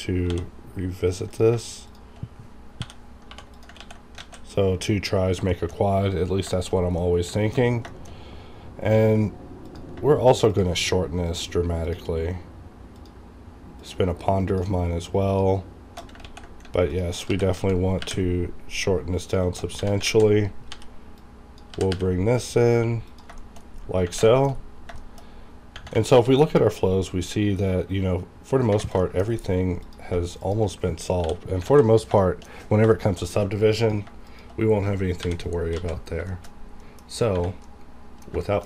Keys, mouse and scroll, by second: 0.3 j, 1.3 click, 1.9 shift+click, 2.8 j, 3.3 j, 3.5 click, 3.8 ctrl+x, 4.2 alt+a, 4.7-6.4 scroll down 5, 5.5 shift+middle click, 6.5 shift+middle click, 6.7 scroll down 2, 9.6 alt+click, 9.7 alt+click, 16.2 ctrl+x, 16.9 ctrl+alt+click, 17.3 ctrl+g, 17.5 ctrl+z, 18.0 ctrl+y, 19.2 ctrl+click, 19.8 ctrl+1, 20.0 ctrl+alt+a, 20.7 ctrl+b, 21.2 ctrl+click, 21.7 ctrl+g, 21.9 ctrl+y, 23.1 ctrl+click, 23.3 ctrl+shift+scroll up 1, 23.5 ctrl+shift+scroll down 1, 23.6-24.0 ctrl+scroll up 1, 24.0 ctrl+-, 24.3 ctrl+shift+middle click, 25.0 ctrl+shift+middle click, 25.3-25.7 ctrl+scroll up 2, 25.7 ctrl+-, 26.1 r, 28.9 r, 29.0 shift+middle click, 29.2-29.8 scroll up 1, 29.8 click, 30.4 shift+click, 31.2 j, 31.7 alt+a, 32.2 shift+middle click, 32.6 scroll down 1, 32.9 shift+middle click, 33.3-33.8 scroll up 1, 33.8 click, 34.3 shift+click, 35.2 j, 35.7 alt+a, 36.0-36.8 scroll down 2, 36.3 shift+middle click, 36.8 middle click, 37.0 scroll up 1, 37.3 Tab, 37.6 middle click.